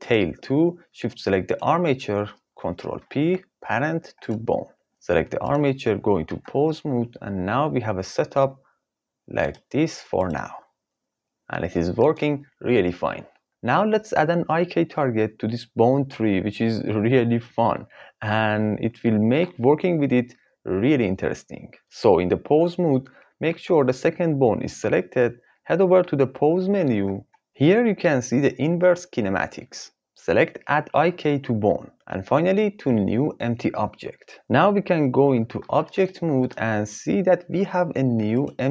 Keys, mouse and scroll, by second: 2.9 ctrl+p, 5.5 click, 6.3 ctrl+Tab, 7.4 r, 10.2 click, 10.4 r, 26.9-34.1 drag, 35.6 ctrl+Tab, 38.3 click.